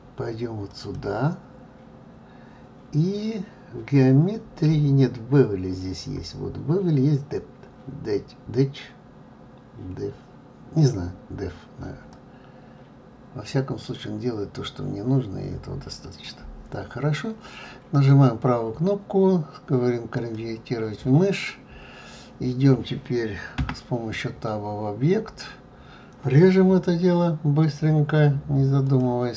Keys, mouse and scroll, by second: 0.7 click, 4.3-5.0 scroll down 2, 5.0-6.3 scroll down 2, 12.1-15.1 drag, 17.9-21.0 right drag, 23.6 Tab, 25.1-26.3 scroll up 3, 28.8-29.3 drag.